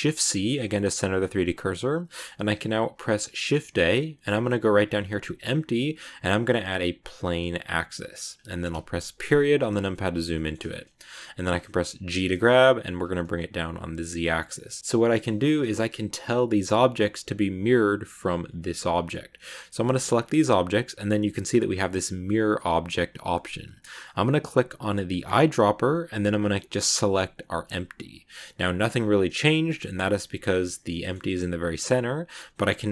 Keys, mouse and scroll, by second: 0.9 shift+a, 2.7 shift+a, 9.0 KP_Decimal, 9.5 scroll down 2, 9.8-11.0 middle drag, 11.0-12.0 scroll up 1, 12.0 g, 14.5 middle click, 15.4 scroll down 2, 15.9 g, 18.5 right click, 18.8 middle click, 19.5 right click, 25.1 click, 30.8-32.1 middle drag, 32.1 right click.